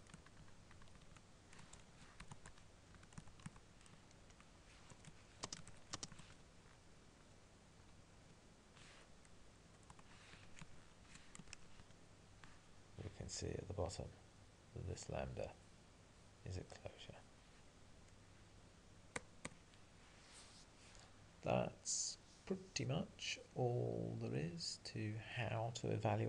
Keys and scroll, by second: 0.0 Left, 0.8 ctrl+Left, 1.1 ctrl+Left, 1.1 ctrl+Right, 2.3 Tab, 11.9 ctrl+e.